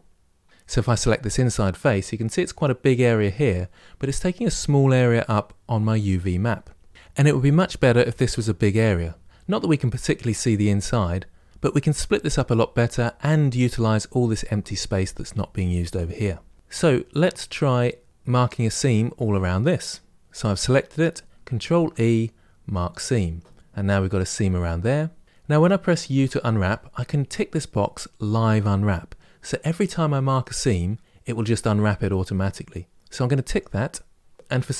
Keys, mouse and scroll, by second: 0.8 click, 22.7 ctrl+e.